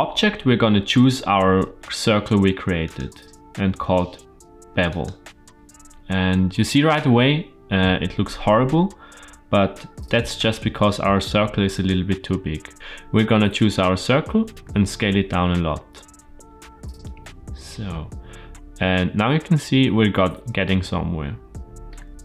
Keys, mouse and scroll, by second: 2.7-4.9 drag, 5.6-8.9 scroll down 1, 11.6 click, 12.7 Tab, 12.7 s, 14.4 s, 21.7 shift+middle click.